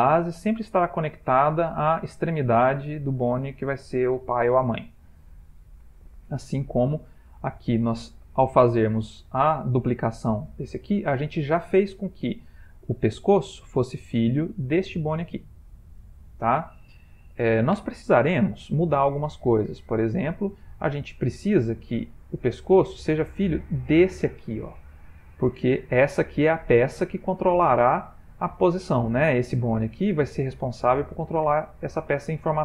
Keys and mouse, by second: 5.4 ctrl+middle click, 6.1 shift+middle click, 6.6 shift+middle click, 7.5 click, 8.9 click, 9.5 g, 12.6 click, 14.8 click, 21.9 click, 29.5 click.